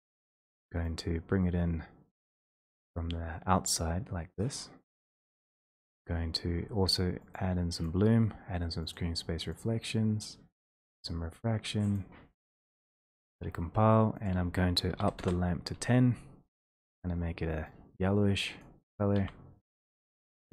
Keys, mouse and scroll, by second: 0.4 click, 5.1 click, 8.0 click, 9.1 click, 9.7 click, 10.8 click, 12.0 click, 14.3 click, 15.0-15.6 typing, 15.6 Return, 16.9 click, 19.6 e.